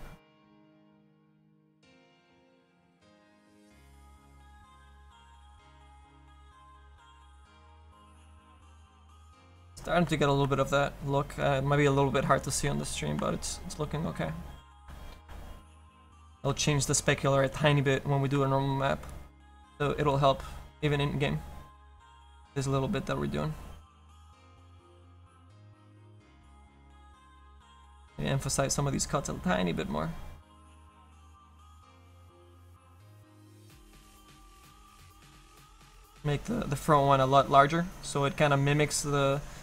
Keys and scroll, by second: 19.6 s.